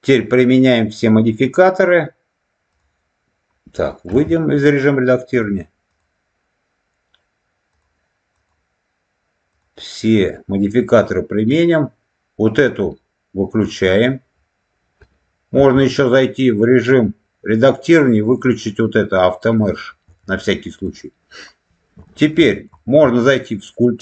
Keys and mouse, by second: 2.7 click, 4.0 Tab, 5.2 click, 7.6 click, 9.4 click, 13.8 click, 15.4 Tab, 18.1-19.8 drag, 20.0 Tab, 22.0 shift+middle click, 22.7 shift+middle click.